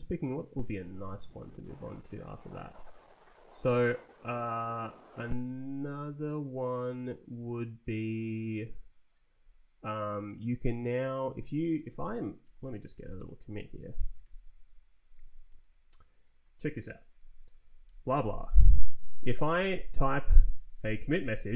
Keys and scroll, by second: 12.1-15.5 typing, 17.6-21.5 typing.